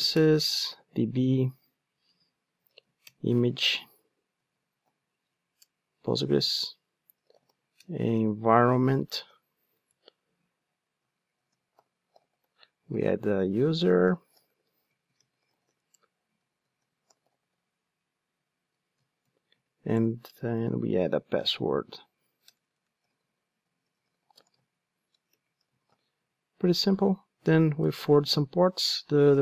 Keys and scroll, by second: 3.0 Return, 8.1 super+z, 9.9 Return, 27.8 Return.